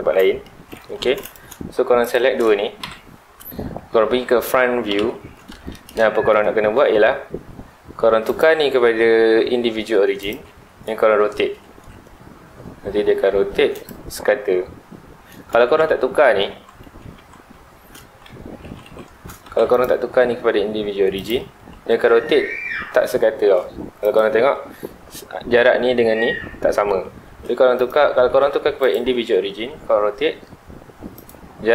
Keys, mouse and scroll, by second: 0.4 shift+middle click, 0.9 3, 1.2 click, 2.0 shift+click, 2.8 ctrl+l, 4.9 KP_1, 5.6-7.1 shift+middle drag, 7.1-8.2 scroll up 1, 8.2-10.7 drag, 10.7-11.7 shift+middle drag, 11.7 r, 13.8 click, 14.0 scroll down 1, 15.3 scroll up 1, 15.8 ctrl+z, 18.0 ctrl+shift+z, 19.4 ctrl+z, 19.7-21.5 drag, 21.5 r, 24.1 click, 27.3 ctrl+z, 27.7-29.6 drag, 29.6 r, 31.2 click.